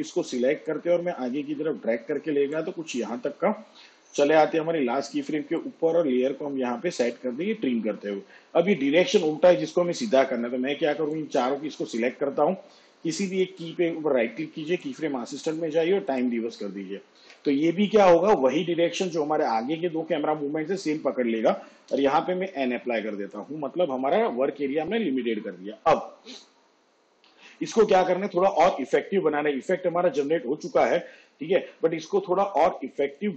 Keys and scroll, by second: 4.1 j, 21.9 n.